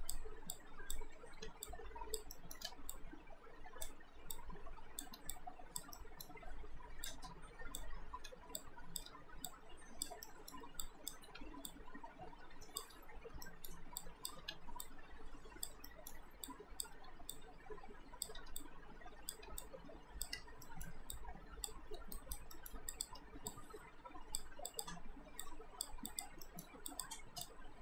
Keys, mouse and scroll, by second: 1.4 r, 1.7 click, 2.4 alt+middle click, 2.7 w, 2.9 click, 5.1 r, 5.3 click, 6.0 alt+middle click, 6.0-6.7 alt+scroll down 2, 7.1 click, 8.2 r, 8.6 click, 9.1 w, 9.5 click, 10.3 alt+middle click, 10.8 click, 11.3 r, 11.7 click, 12.9 w, 13.5 alt+middle click, 14.0 click, 14.4 r, 14.8 click, 15.9 alt+middle click, 16.5 click, 17.0 r, 17.3 click, 18.4 w, 18.6 click, 19.3 r, 19.6 click, 20.6 alt+middle click, 21.2 click, 22.2 alt+right click, 22.5 alt+middle click, 22.9 click, 23.2 w, 23.5 click, 26.5 alt+middle click, 26.9 click.